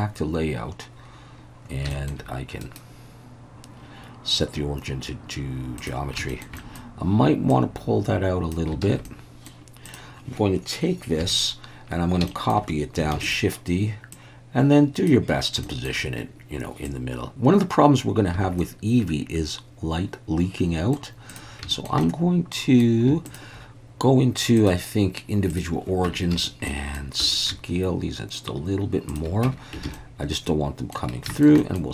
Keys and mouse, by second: 1.9 shift+middle click, 2.6-6.2 right drag, 6.3 shift+middle click, 6.6 middle click, 7.5-8.5 drag, 8.9 alt+a, 9.1 middle click, 9.9 click, 11.2 KP_1, 12.3 shift+middle click, 13.2 shift+d, 13.2 click, 14.2 click, 15.6 shift+middle click, 18.4 alt+a, 18.6-20.9 middle drag, 21.3 drag, 21.7 shift+middle click, 22.0-22.8 middle drag, 23.3 shift+click, 24.6-25.6 drag, 26.1 Tab, 26.4 a, 26.7 middle click, 27.5 s, 29.1 shift+click, 29.8 Tab, 29.9 alt+a, 29.9-30.9 middle drag, 31.3 shift+middle click, 31.6 middle drag.